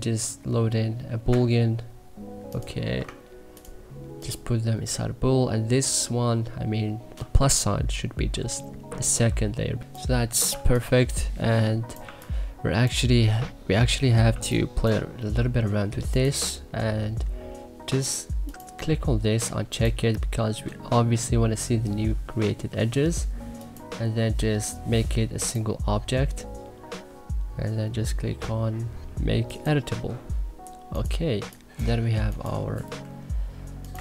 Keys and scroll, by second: 9.8 1, 10.4 2, 12.0 1, 33.0 Delete.